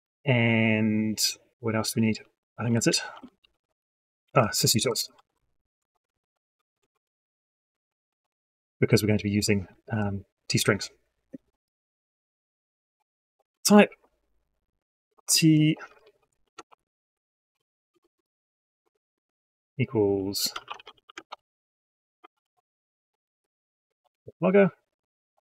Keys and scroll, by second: 22.5 ctrl+space.